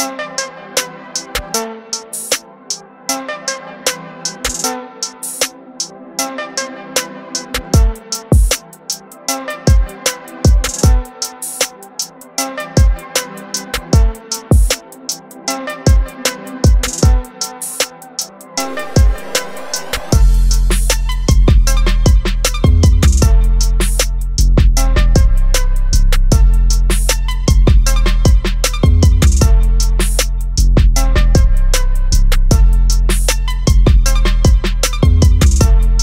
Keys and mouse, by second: 2.5 click, 5.0 click, 19.9 click, 26.7 click, 33.5 click.